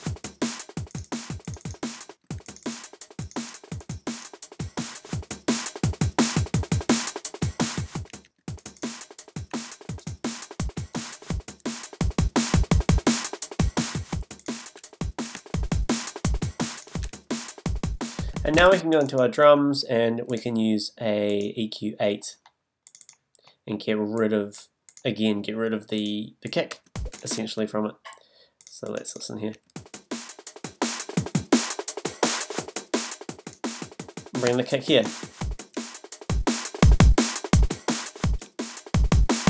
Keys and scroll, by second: 8.1 □, 14.6 super+a, 18.6 space, 26.7 space, 29.5 space.